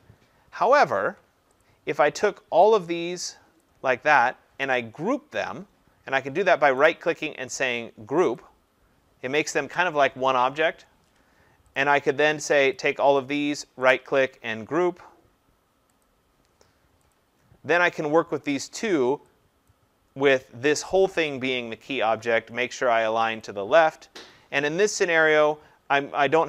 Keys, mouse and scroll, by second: 0.6 ctrl+z, 1.6 click, 3.6 click, 6.8 right click, 8.4 click, 11.8 click, 12.7 click, 13.9 right click, 16.0 click, 17.1 click, 19.7 click, 23.4 click.